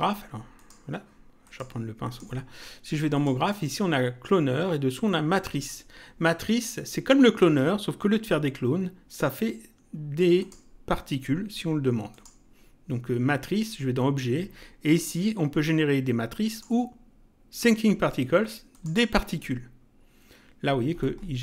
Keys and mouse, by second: 0.6 click, 3.2 click, 10.4 click, 12.1 click, 16.5 click, 18.7 click.